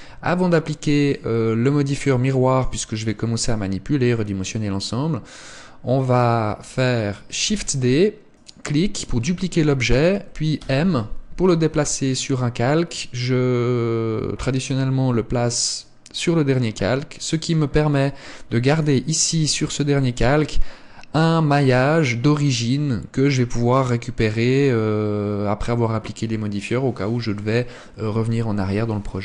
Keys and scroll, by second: 7.6 shift+d, 10.8 m.